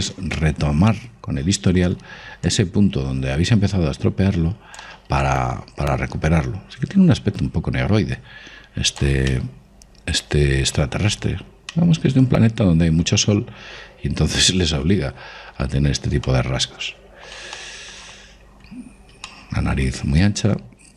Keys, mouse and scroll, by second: 1.0-3.0 middle drag, 3.2 click, 5.9 click, 10.0-11.7 middle drag, 11.7-12.4 scroll down 1, 12.4-13.2 scroll up 1, 13.2 middle click, 16.2-16.8 scroll, 16.8-20.9 middle drag.